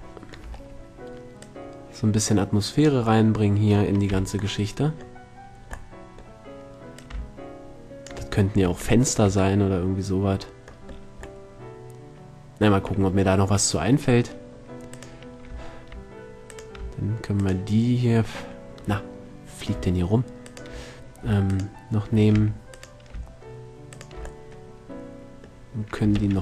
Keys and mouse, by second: 0.1 drag, 1.9-3.6 drag, 3.7 middle drag, 3.9 middle click, 4.5 z, 6.5-8.4 middle drag, 8.8 middle click, 9.0 a, 9.2 middle drag, 10.5-11.4 middle drag, 12.8 middle click, 13.6 middle click, 22.8 a.